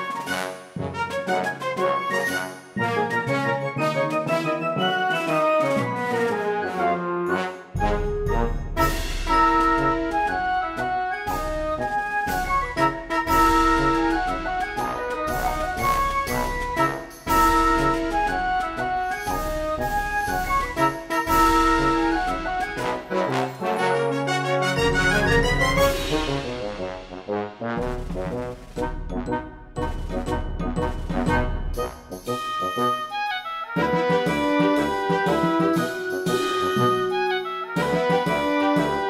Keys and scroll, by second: 6.2 space.